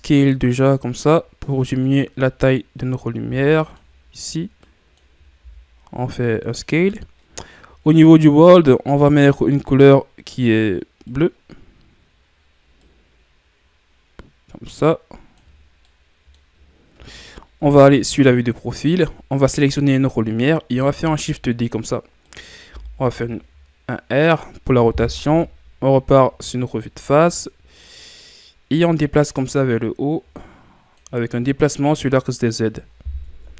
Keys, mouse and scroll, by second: 3.2 s, 4.6 click, 5.3 s, 11.2 click, 15.7 scroll down 2, 15.9-17.6 middle drag, 17.6 KP_3, 18.8-19.8 ctrl+scroll down 3, 21.0 shift+d, 22.6 r, 25.2 KP_1, 26.7-27.3 scroll up 1, 27.3-29.4 middle drag, 29.4-32.1 drag, 32.1-33.3 middle drag, 33.3 KP_1.